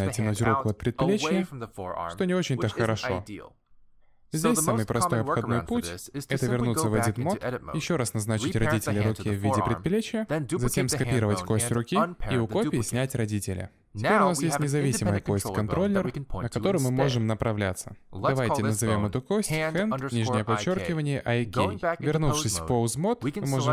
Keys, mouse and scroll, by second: 0.8 middle click, 1.1 scroll down 1, 1.3 shift+middle click, 1.5 middle click, 1.8 g, 3.1 middle click, 4.6 alt+g, 5.0 shift+middle click, 5.2 middle click, 5.5 g, 6.5-7.1 scroll up 3, 6.6 Tab, 7.2 shift+click, 8.0 ctrl+p, 9.7 click, 9.9 middle click, 10.3 shift+d, 12.3 alt+p, 14.1 Tab, 14.4 shift+middle click, 14.6 middle click, 14.8 click, 15.5 click, 18.5 click, 19.1 click, 20.0 BackSpace, 20.1 BackSpace, 22.6 middle click.